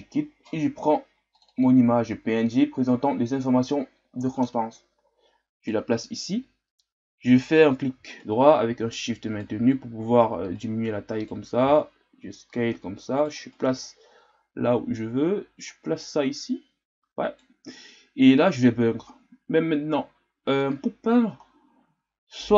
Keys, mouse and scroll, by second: 4.4-9.8 right drag, 9.8-10.5 scroll up 3, 10.5-18.2 right drag.